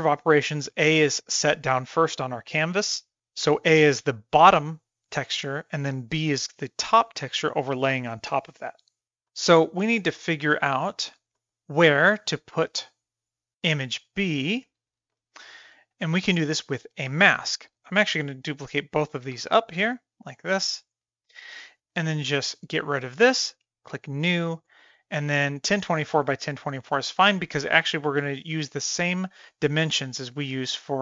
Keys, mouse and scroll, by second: 9.3-9.8 middle drag, 10.5 drag, 11.4 middle click, 15.1 shift+middle click, 15.9-16.3 shift+middle drag, 17.8 click, 18.0 drag, 18.5 shift+d, 20.6 shift+middle click, 22.6 click, 23.9-31.0 drag.